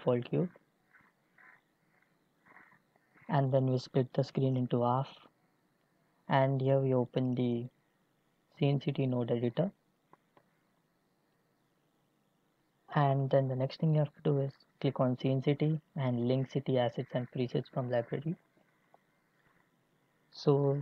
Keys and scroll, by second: 2.1 x.